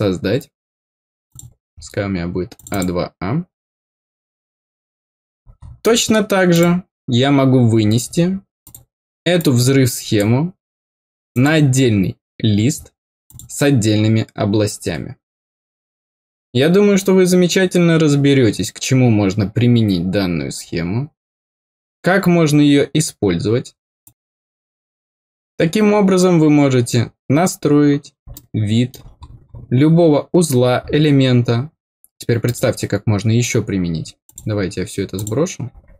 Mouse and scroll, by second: 1.2 click, 1.7 scroll down 2, 2.5 click, 6.5 click, 7.7-8.0 scroll up 2, 8.6 click, 9.3 click, 11.3 click, 13.2 click, 27.2 scroll down 2, 28.3 middle click, 29.2 scroll up 2, 29.4 scroll down 2, 30.5-30.9 scroll down 4, 32.4 click, 34.2-35.2 drag.